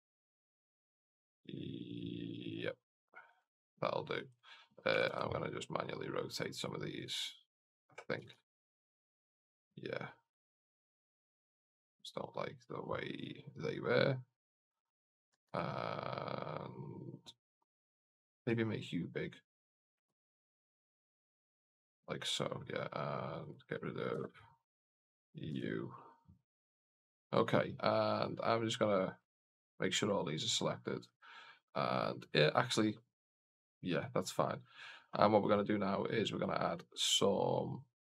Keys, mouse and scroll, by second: 2.3 click, 4.2 right click, 4.8 r, 6.2 r, 7.4 right click, 8.0 r, 10.2 right click, 10.8 r, 14.3 right click, 15.2 r, 19.8 r, 23.3 right click, 24.0 x, 24.6 right click, 25.3 g, 27.9 click, 29.2 shift+click, 33.5 right click, 35.3 right click.